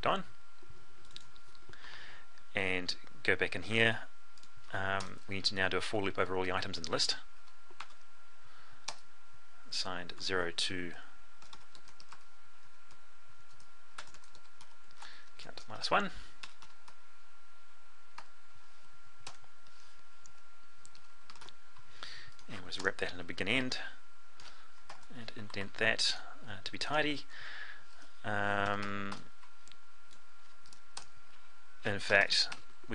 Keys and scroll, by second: 24.4 ctrl+shift+i.